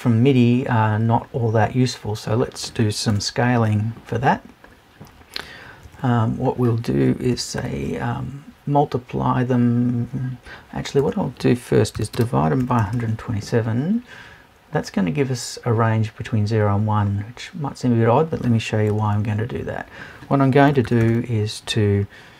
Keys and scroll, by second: 3.1 BackSpace, 11.0 BackSpace.